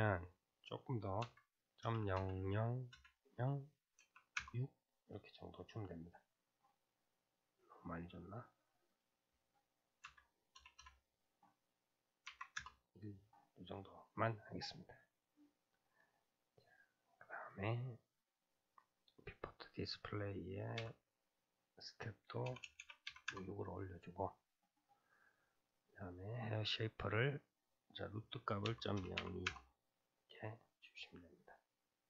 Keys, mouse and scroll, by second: 0.1-2.2 drag, 2.2 KP_0, 5.4-8.9 middle drag, 8.9-10.8 drag, 10.8 KP_0, 13.3-17.3 middle drag, 17.3-18.2 drag, 18.2-18.7 scroll down 2, 18.7-22.6 drag, 22.6 BackSpace, 22.8 BackSpace, 24.0-25.7 scroll down 5, 25.7-26.3 drag, 26.3-27.1 scroll down 3, 27.1-30.2 drag, 30.4-32.0 middle drag.